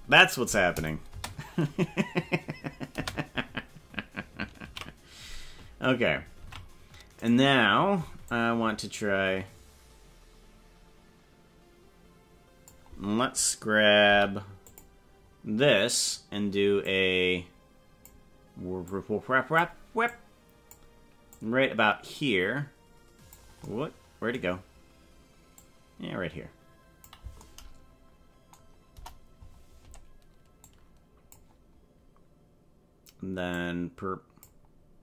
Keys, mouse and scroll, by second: 0.8 click, 1.1 space, 3.1 space, 4.7 ctrl+s, 6.4 ctrl+Tab, 7.2 right click, 8.3-12.7 drag, 16.8-18.1 drag, 18.9 click, 20.1 click, 21.3-23.3 drag, 25.5-27.2 drag, 28.9 KP_0, 30.6 click, 33.6-34.6 drag.